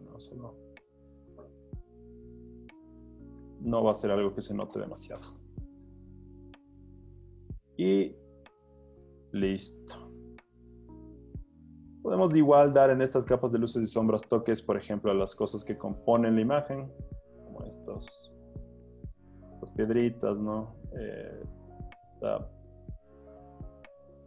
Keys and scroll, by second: 2.8 z, 4.0 z, 5.4 h, 6.3 z, 7.2 z, 9.6 z, 11.3 z, 14.1 b, 22.3 super+z.